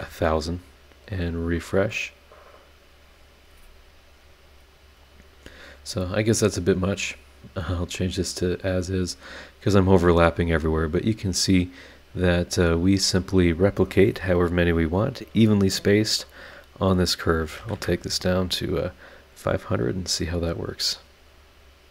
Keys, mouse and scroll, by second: 1.4 click, 5.4-5.9 scroll up 4, 7.5 click, 8.0 click, 8.5 click, 8.9-10.9 scroll down 9, 12.1 click, 13.2 click, 17.4 KP_5, 17.6 KP_0, 19.7 click.